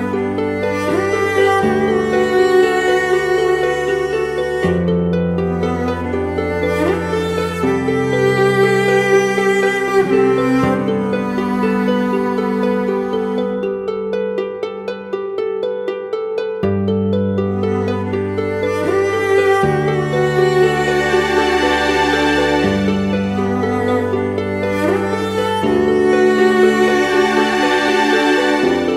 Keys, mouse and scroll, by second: 0.8 alt+shift+click, 3.7 ctrl+z, 7.9 Return, 12.3 ctrl+t, 15.6 Return, 16.2 Right, 16.4 Right, 16.6 Right, 16.7 Right, 16.9 Right, 17.4 Up, 18.2 Right.